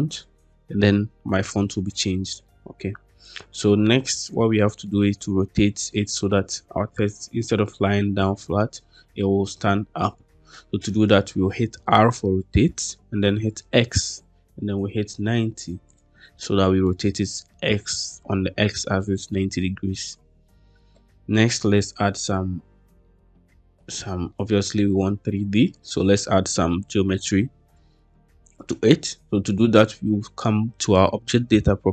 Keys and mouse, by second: 2.3-4.7 middle drag, 11.7 r, 13.4 x, 14.9 9, 15.3 0, 15.8 click, 16.4-16.7 middle drag, 20.9-21.3 middle drag, 21.4-21.9 middle drag, 22.9-23.3 middle drag, 24.2 shift+middle drag.